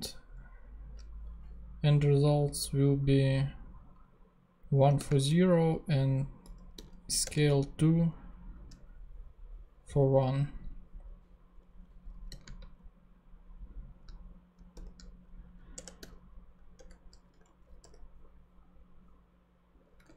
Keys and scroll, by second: 5.0 ,, 5.2 space, 6.3-7.3 typing, 11.6 Left, 12.2 ,, 12.4 space, 14.7 shift+e, 15.7 shift+Return, 16.8 Return, 17.3 super+Return, 17.4 super+Right, 17.8 super+;.